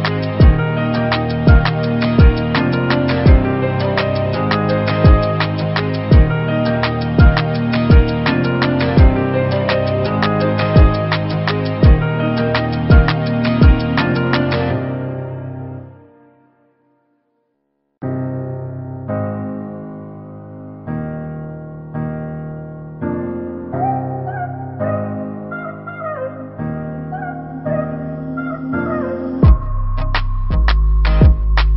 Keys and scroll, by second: 17.4 7, 18.4 0.